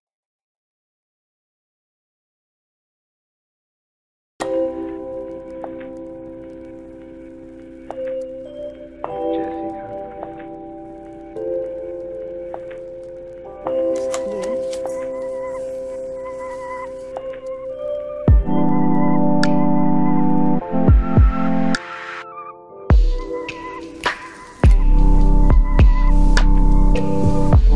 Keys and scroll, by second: 8.1 ctrl+t, 19.7 ctrl+l.